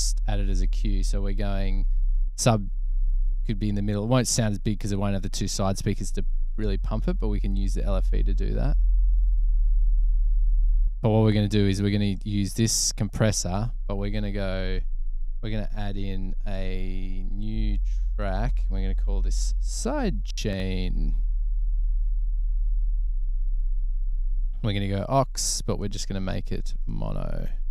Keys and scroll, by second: 19.0-20.0 typing, 21.2 typing.